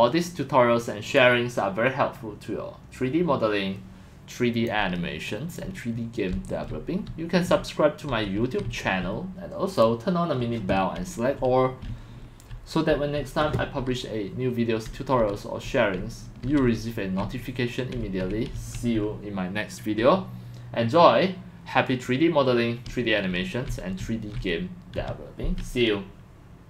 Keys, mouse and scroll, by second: 1.0 click, 5.2 click, 5.7-9.1 typing, 10.7-19.0 typing, 22.6-24.5 typing, 24.9 Escape.